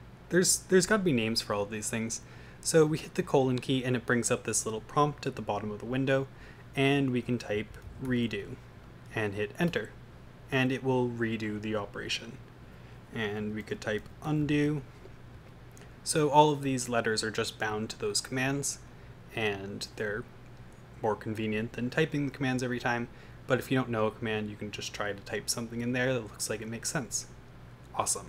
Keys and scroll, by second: 7.3-8.8 typing, 9.6 Return, 13.4-15.0 typing, 15.4 Return.